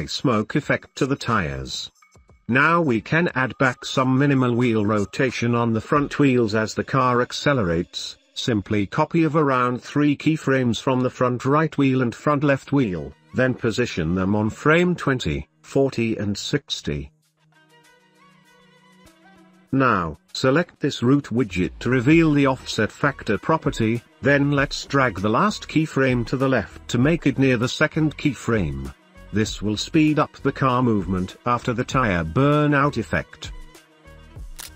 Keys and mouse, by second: 2.5 middle click, 3.0-5.3 drag, 5.7-6.1 drag, 6.6 shift+d, 8.3 click, 9.0 s, 10.7 space, 12.7 space, 12.7 g, 13.5 click, 13.8 s, 14.7 space, 22.2 click, 25.1 middle click, 26.5 g, 27.3 space, 27.5 g, 29.2 g, 30.4 space, 34.4 space.